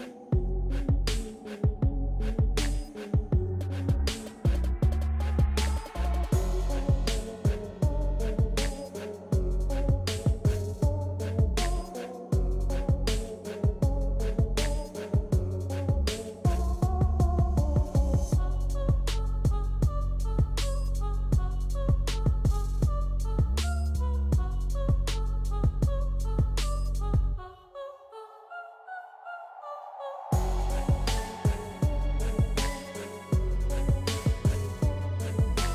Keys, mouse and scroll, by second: 5.1-9.3 drag, 9.8-12.3 drag, 9.8 typing, 12.1 typing, 12.7-17.7 drag, 17.7 typing, 19.1 click, 19.2-21.7 drag, 19.2 typing, 21.6 typing, 21.7 ctrl+scroll down 1, 22.5-23.9 drag, 23.9 scroll up 1.